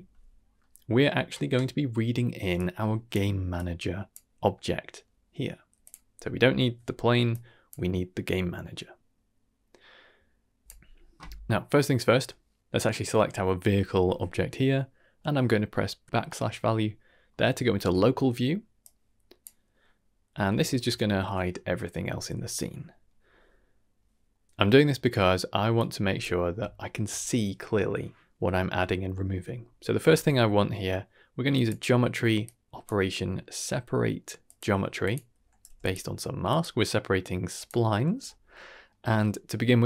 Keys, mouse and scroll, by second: 0.5 middle click, 2.5 click, 3.5-4.1 drag, 5.8 click, 6.5 x, 7.2-7.6 drag, 10.6 click, 11.4-11.7 scroll down 2, 11.7 middle click, 12.6 click, 16.0 KP_Divide, 17.2 middle click, 17.6 shift+middle click, 17.9-18.4 scroll up 1, 18.7-19.4 drag, 20.2 middle click, 20.6 shift+middle click, 22.8 middle click, 24.3 middle click, 25.7 click, 26.4 scroll up 1, 26.7 shift+middle click, 29.1 middle click, 29.5 scroll up 1, 29.7 middle click, 30.0 shift+a, 36.4-37.6 drag, 38.5-38.9 middle drag, 39.1-39.4 scroll up 1, 39.4 middle click.